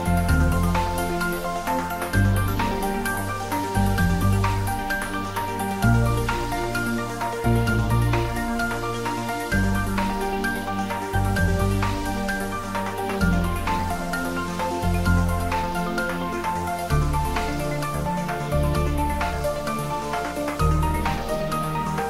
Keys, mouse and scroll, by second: 6.3 click, 8.7-9.6 scroll up 2, 9.6-10.6 scroll up 1, 11.3-12.3 click, 12.5-13.3 scroll down 1, 14.6 click, 18.0 click, 21.6 Tab.